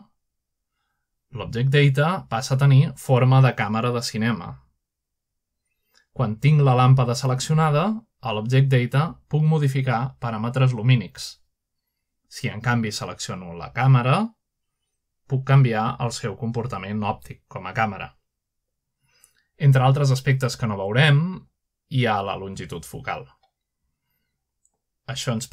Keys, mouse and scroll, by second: 0.4 click, 5.4-5.9 scroll down 1, 6.1-6.7 scroll up 1, 8.7 click, 11.8 click, 13.0-13.6 typing, 14.1 Return, 15.5 click, 15.9-16.4 drag, 16.8 typing, 19.1 click, 22.1 6, 22.5 5, 23.2 Return, 25.1 click.